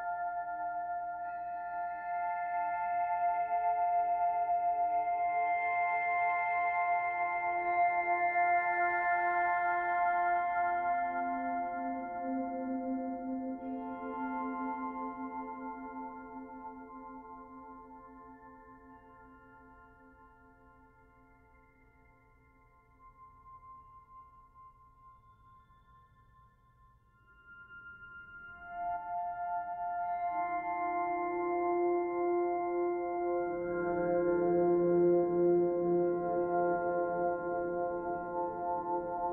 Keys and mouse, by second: 3.7-5.9 ctrl+alt+drag, 7.9-9.2 drag, 9.6 click, 11.0 click, 11.8 shift+click, 12.3 shift+d, 12.6 click, 12.8-14.4 drag, 17.2 click, 17.7 click, 18.3 g, 19.3-20.6 drag, 20.6 shift+d, 21.8-23.1 drag, 22.5 space, 23.6 space, 24.0-25.2 drag, 24.6 space, 26.0 typing, 27.1 space, 27.8-29.8 ctrl+alt+drag, 31.4 click, 33.1 click, 33.6-35.3 typing, 37.1 click, 38.5 click.